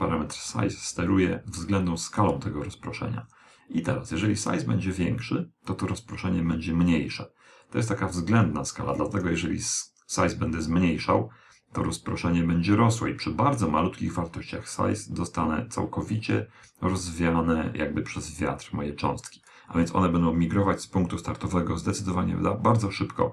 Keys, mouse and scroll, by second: 2.0 click.